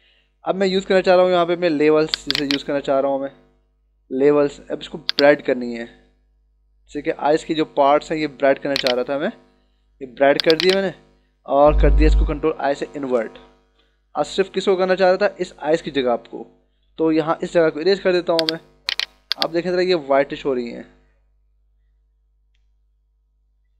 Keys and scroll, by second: 12.7 ctrl+i, 14.5 ctrl+=, 17.5 [, 19.2 [.